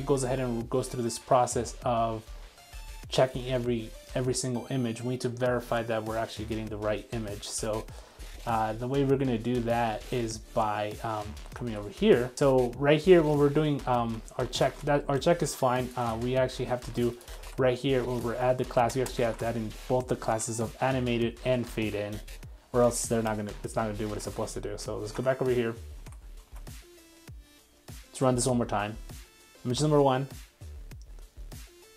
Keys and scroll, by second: 13.8 super+z, 17.5 super+c, 19.3 super+s, 22.7 super+s, 23.4 super+Tab, 26.4 super+r.